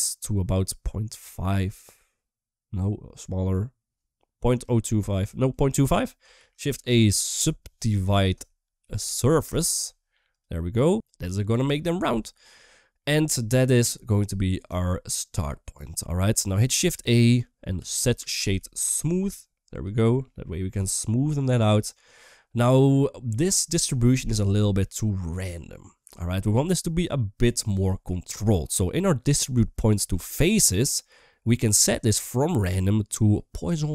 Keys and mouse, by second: 5.5 click, 6.2 shift+a, 8.8 Down, 12.8-13.6 middle drag, 14.7 shift+middle drag, 16.9 shift+a, 20.6-21.0 middle drag, 24.5-25.7 middle drag, 27.1 middle click, 28.9 middle click, 30.0 middle click, 30.7 middle click, 31.9-33.9 drag.